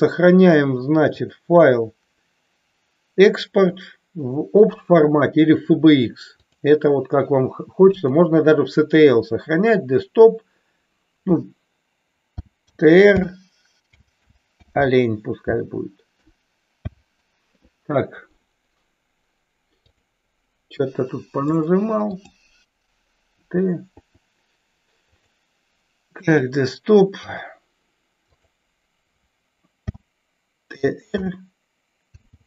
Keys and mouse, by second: 1.3-6.6 drag.